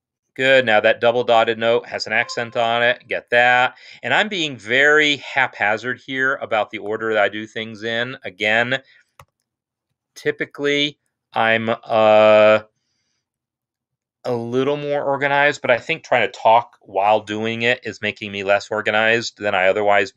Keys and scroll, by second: 2.6 shift+v.